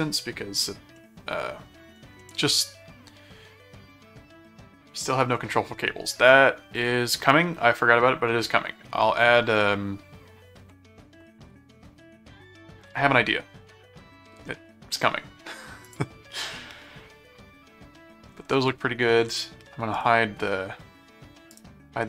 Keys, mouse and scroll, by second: 1.0 middle click, 2.2 middle click, 15.8 click, 16.5-18.1 middle drag, 18.5 middle click, 19.9 right click, 21.5 right click.